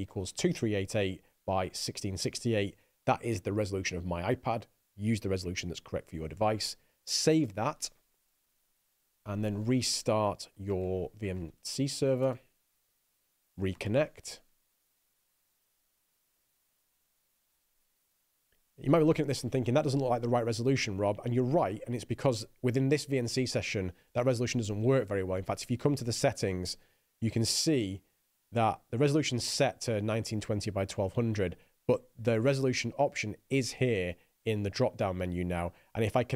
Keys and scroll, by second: 8.3-9.2 typing, 10.9 Up, 11.1 ctrl+r, 11.4-12.3 typing, 12.6 Return, 15.1 s, 16.1 c, 16.6 Return, 17.6-18.3 typing.